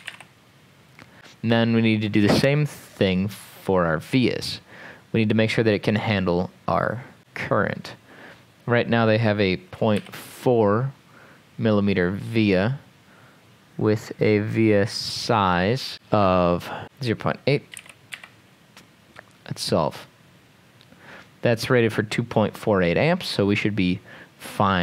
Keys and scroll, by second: 0.0-0.6 typing, 1.2 Tab, 10.0 4, 17.5-18.6 typing.